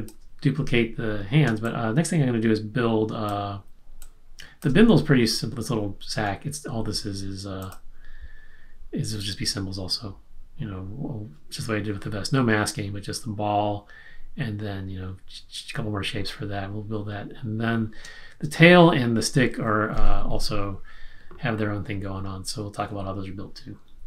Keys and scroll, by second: 1.6 space, 18.0 space.